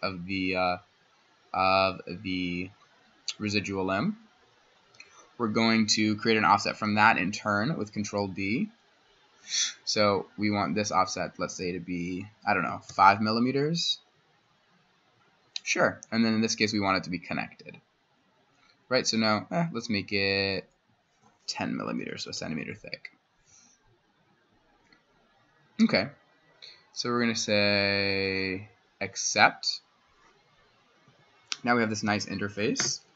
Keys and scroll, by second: 6.9 ctrl+d, 12.9 5, 13.3 Tab, 21.7-22.5 typing, 31.1 Escape, 32.1 s.